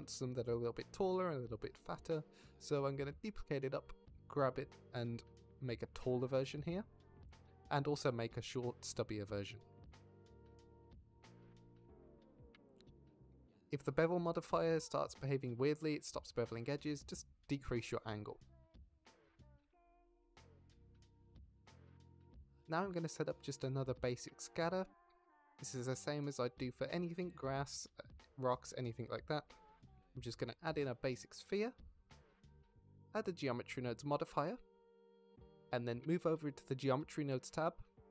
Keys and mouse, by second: 0.0 z, 2.4 shift+d, 3.1 y, 6.1 ctrl+shift+click, 6.8 shift+click, 7.6 g, 8.1 z, 9.5 click, 9.8 Tab, 9.9 z, 10.5 drag, 10.7 Tab, 11.0 g, 11.3 z, 11.8 shift+click, 12.0 Tab, 12.7 middle drag, 13.4 Tab, 13.7 middle click, 13.8 a, 14.2 s, 14.4 shift+z, 16.4 Tab, 17.7-19.4 drag, 22.3 Tab, 22.3 ctrl+s, 23.4 middle drag, 24.0-24.8 middle drag, 26.7 shift+a, 32.4 click, 33.0 drag, 34.7-36.0 drag.